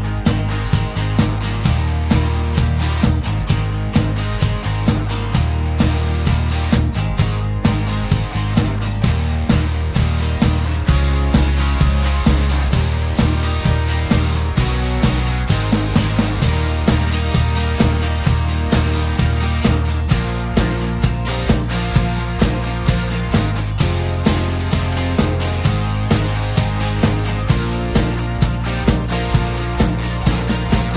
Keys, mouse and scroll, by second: 2.8 click, 3.4 click, 5.4 click, 6.9 click, 7.6 click, 10.4 click, 12.2 click, 13.6 click, 14.7 click, 15.9 click, 17.2 click, 18.2 click, 19.9 click, 22.5 click, 23.0 click, 23.6 click, 25.3-27.7 drag, 29.2-30.9 drag.